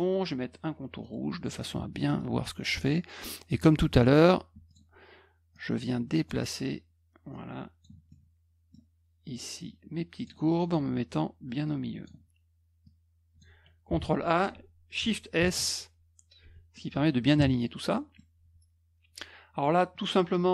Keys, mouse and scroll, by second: 1.0 middle click, 2.0 middle click, 2.0 scroll up 1, 2.8 middle click, 2.8 scroll up 1, 4.6 click, 5.5 click, 7.3 click, 8.1 middle click, 9.5 click, 10.5 middle click, 11.6 click, 12.8 click, 13.9 ctrl+a, 15.3 shift+s, 16.4 F1, 17.9 middle click.